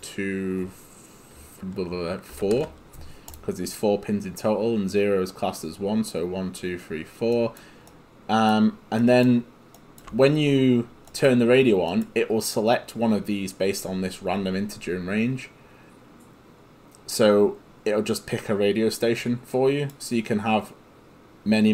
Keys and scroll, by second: 2.4 4, 2.6 Return.